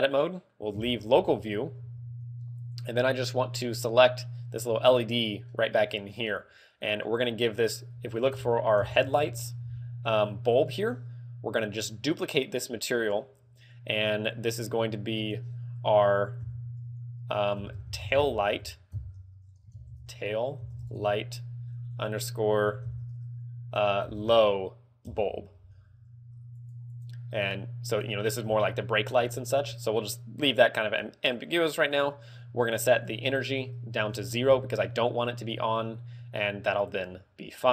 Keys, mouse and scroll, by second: 1.2 KP_Divide, 2.1 z, 3.3 right click, 4.1 right click, 5.0 middle click, 5.9 middle click, 7.1 click, 13.1 click, 13.4 click, 14.1 click, 26.7 click, 32.9 ctrl+click, 37.2 middle click.